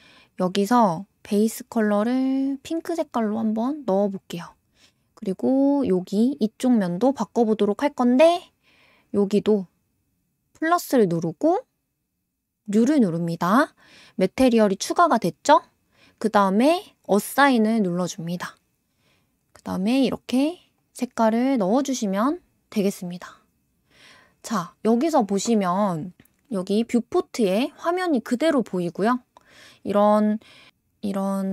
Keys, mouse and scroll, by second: 0.9 click, 2.8 click, 5.5 click, 10.6-15.8 drag, 17.0-19.4 drag, 20.8 click, 21.4 click, 26.1 scroll up 1, 26.1 scroll down 3, 26.5 scroll up 2, 26.9 Tab, 27.3 click, 29.1 click, 30.7-31.5 scroll down 5.